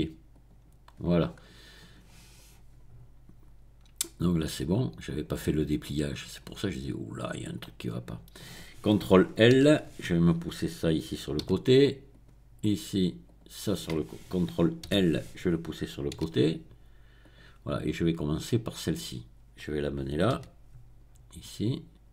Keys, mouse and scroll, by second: 0.3 click, 0.7 middle click, 1.2-1.8 scroll down 1, 1.8 scroll down 1, 4.0-4.8 scroll up 1, 5.1 click, 7.6 click, 9.5 ctrl+i, 11.6 g, 12.1 click, 13.2 click, 14.8 ctrl+i, 16.2 g, 17.2 click, 18.0-19.3 drag, 20.4 g.